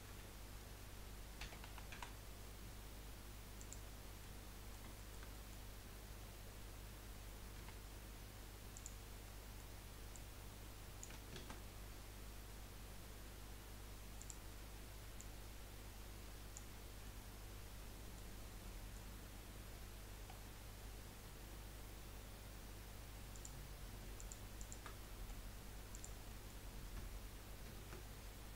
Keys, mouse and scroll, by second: 0.1 F3, 4.2-7.6 middle drag, 7.6 2, 8.7 click, 9.2 middle click, 10.1 click, 11.3 ctrl+z, 14.2 click, 15.1 click, 16.7 scroll down 4, 17.0-18.3 middle drag, 18.3-18.6 scroll up 3, 18.6 middle click, 19.1-20.0 scroll up 1, 20.3-20.8 scroll down 5, 21.1-21.9 scroll down 1, 21.9-22.8 scroll up 7, 23.3 click, 24.2 alt+shift+click, 24.6 alt+shift+click, 25.0 middle click, 25.9 click, 26.3-27.7 middle drag, 27.7 ctrl+b.